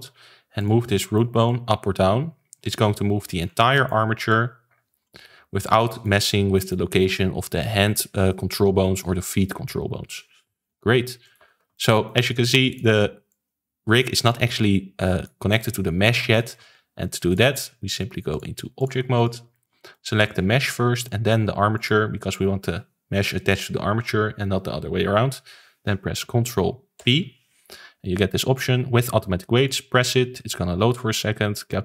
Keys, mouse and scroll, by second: 0.9 middle click, 1.4 click, 3.4 scroll down 4, 3.7-4.2 middle drag, 4.2 click, 5.8-6.2 middle drag, 6.2 scroll up 3, 6.5-9.7 middle drag, 10.6 alt+g, 11.2 click, 11.4 ctrl+s, 11.7-12.6 shift+middle drag, 12.6 click, 13.2 click, 15.5-16.5 middle drag, 16.5 ctrl+z, 17.2 click, 18.3 click, 19.5-20.2 shift+middle drag, 20.2 click, 20.6 scroll up 1, 20.9-21.7 middle drag, 21.7 shift+click, 26.9 ctrl+p, 31.6-31.8 middle drag.